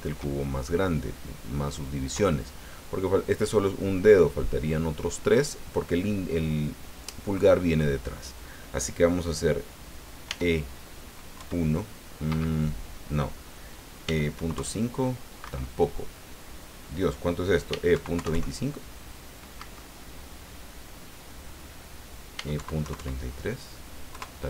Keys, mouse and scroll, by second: 10.2 e, 11.3 KP_1, 12.2 Escape, 14.0 e, 14.3 KP_Decimal, 14.5 KP_5, 15.4 Escape, 17.7 e, 17.9 KP_Decimal, 18.1 KP_2, 18.3 KP_5, 19.6 Escape, 22.3 e, 22.5 KP_Decimal, 22.8 KP_3, 24.1 KP_Enter.